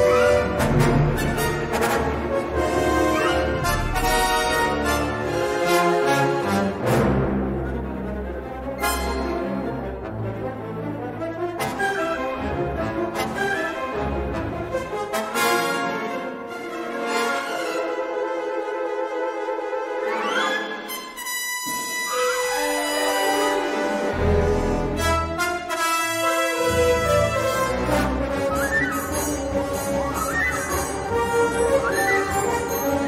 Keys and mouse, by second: 6.1 g, 8.7 click, 10.6 middle click, 14.1 shift+middle click, 14.8 s, 15.6 g, 18.5 middle click, 21.7 middle click, 22.4 3, 23.7 middle click, 24.6 l, 24.9 middle click, 25.4 s, 27.2 g, 29.1 middle click, 29.2 3, 30.2 i.